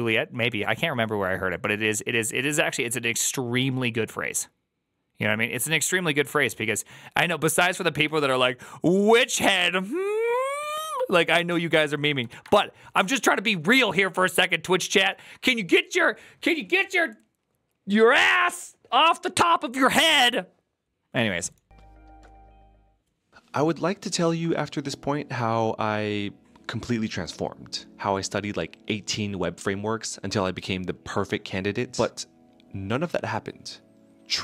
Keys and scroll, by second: 7.9 alt+[.